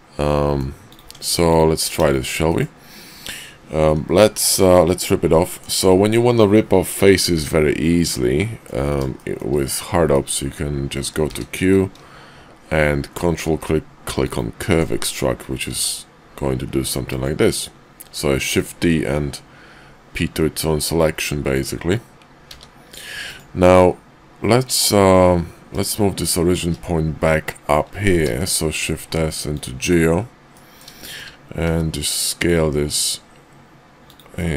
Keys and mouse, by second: 0.9 click, 1.1 Tab, 1.5 click, 2.5 middle click, 4.4 middle click, 5.4 middle click, 7.9 middle click, 9.2 shift+middle click, 10.0 middle click, 11.1 q, 15.7 g, 18.6-21.6 middle drag, 22.4 s, 28.2 shift+s, 30.5-30.8 drag, 31.1 shift+click, 31.6 s, 34.4 click.